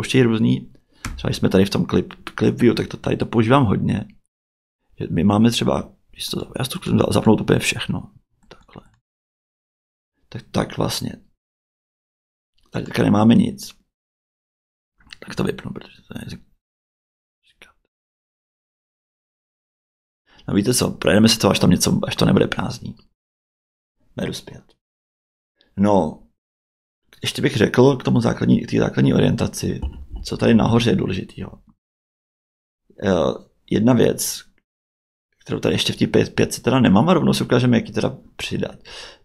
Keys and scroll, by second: 1.0 Tab, 31.4 Tab.